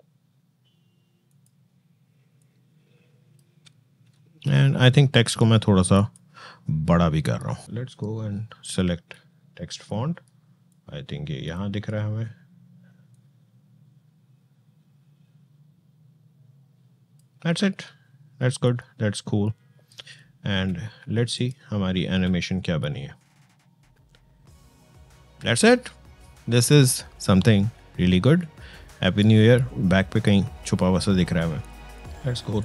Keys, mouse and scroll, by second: 1.1-5.7 drag, 10.5-20.0 drag, 20.0 space, 21.1 click, 21.8 space, 31.8 click.